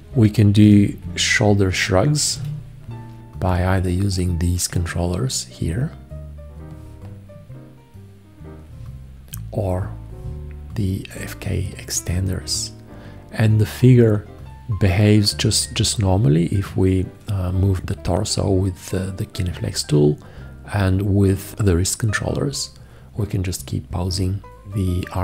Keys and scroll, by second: 0.6 v, 2.4 h.